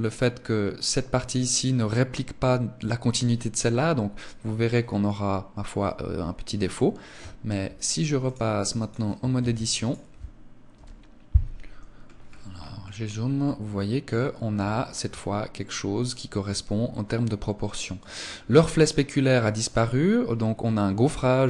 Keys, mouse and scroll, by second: 8.7 click, 9.3 ctrl+s.